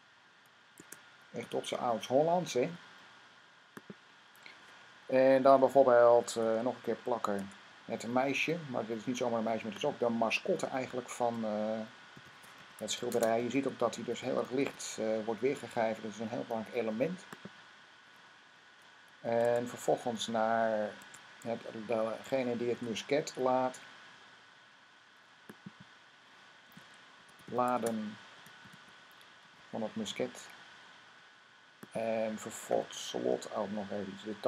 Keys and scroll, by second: 0.0-1.7 typing, 3.1-4.0 typing, 7.2 v, 11.7-14.9 typing, 19.3 Tab, 20.8 Tab, 21.0 typing, 22.6 typing, 26.3-29.9 typing.